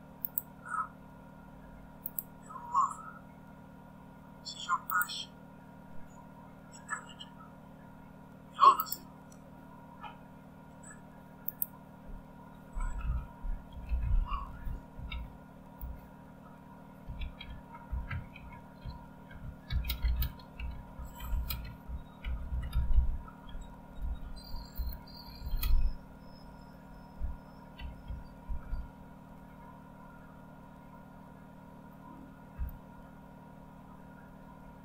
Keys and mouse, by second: 0.0-1.3 drag, 2.4 click, 5.2 click, 9.0-10.3 drag, 13.1-16.1 typing, 17.3-19.6 typing, 21.0 typing, 22.3-25.2 typing, 27.8-28.9 typing, 32.6 Return.